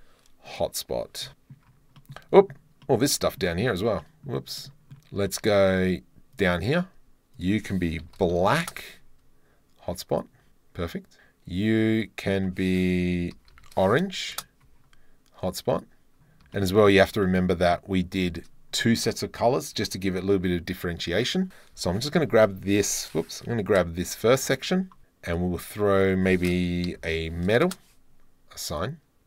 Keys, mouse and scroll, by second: 1.3 middle click, 2.0 middle drag, 2.4 middle drag, 2.8 middle click, 3.3 middle click, 3.5 drag, 4.0 middle drag, 4.6 middle click, 5.3 shift+middle drag, 6.4 right click, 10.1 right click, 11.9 right click, 12.3-14.4 right drag, 15.7 right click, 16.5 shift+middle click, 16.6 shift+drag, 16.8 middle click, 17.3 middle click, 17.7 middle click, 18.8 middle click, 19.8 Tab, 21.2 click, 21.9 ctrl+l, 23.6 1, 24.4 ctrl+l, 24.5 ctrl+l, 25.3 click, 26.0 click, 27.7-28.7 middle drag, 28.8-29.2 middle drag, 29.2 Tab.